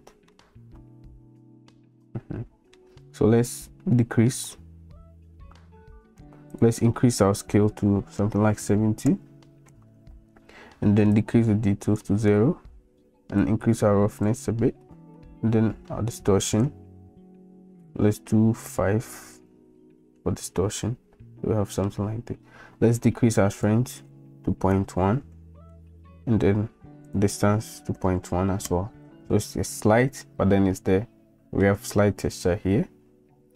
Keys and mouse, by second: 0.3-2.7 middle drag, 6.6-10.0 drag, 11.3 click, 13.5 click, 16.2-19.8 drag, 20.8-21.8 middle drag, 23.7-26.3 drag, 27.1-29.2 drag, 30.5-31.6 middle drag.